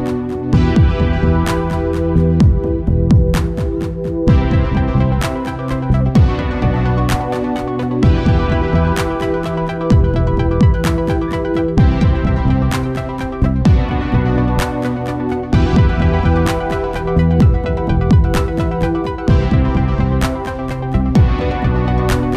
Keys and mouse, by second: 0.1 middle click, 0.3-1.4 middle drag, 1.4 KP_5, 1.8 KP_1, 2.8 r, 5.1 g, 7.3 z, 8.9-10.7 drag, 9.8 z, 10.3-11.3 middle drag, 15.1 Tab, 16.0-17.7 drag, 17.5 right click, 19.8 Tab.